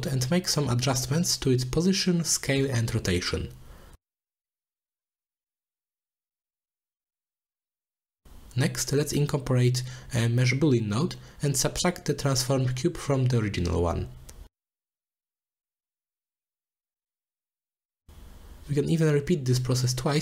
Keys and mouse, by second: 2.3 click, 2.5 shift+click, 2.8 shift+middle click, 3.1 shift+middle click, 4.1 middle click, 4.5 middle click, 5.1 middle click, 5.8 shift+middle click, 6.8 middle click, 7.5 middle click, 10.0 click, 10.3 click, 10.6 shift+a, 13.2 shift+a, 13.8 o, 14.9 click, 15.8-17.0 drag, 18.0-18.7 middle drag, 19.1 middle click.